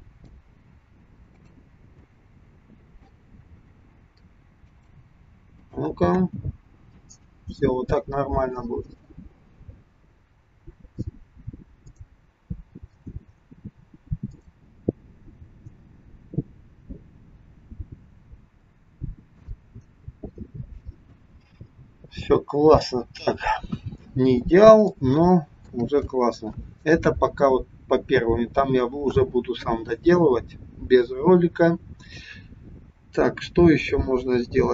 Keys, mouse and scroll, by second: 2.1 click, 3.6 g, 5.7 click, 6.1 space, 9.9-10.5 scroll down 3, 12.0 click, 14.3 click, 21.1 space, 21.9-23.5 scroll down 4, 23.5 KP_1, 24.9 shift+middle click.